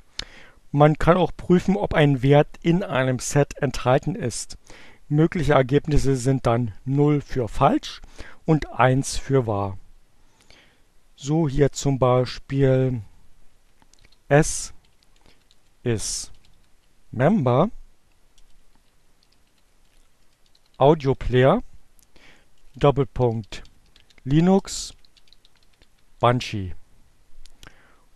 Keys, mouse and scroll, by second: 11.5-12.4 typing, 13.9-25.6 typing.